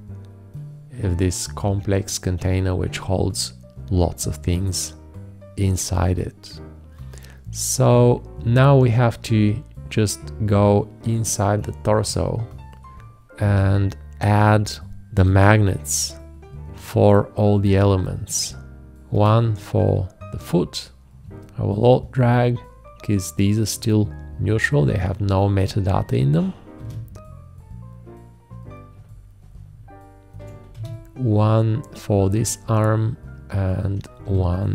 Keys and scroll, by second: 15.3 shift+`, 26.7 `, 30.7 alt+`, 34.3 alt+`.